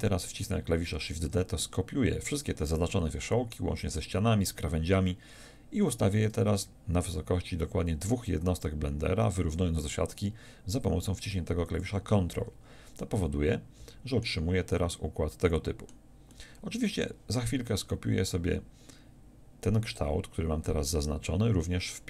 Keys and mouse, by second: 1.2 shift+d.